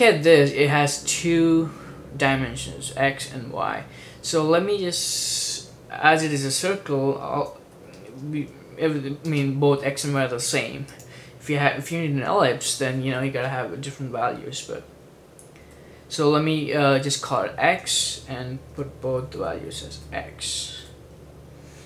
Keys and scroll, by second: 6.4 Left, 7.8 x, 8.2 space, 8.5 =, 9.4 space, 10.6 typing, 15.7 ;, 17.8 Return, 18.6-20.9 typing.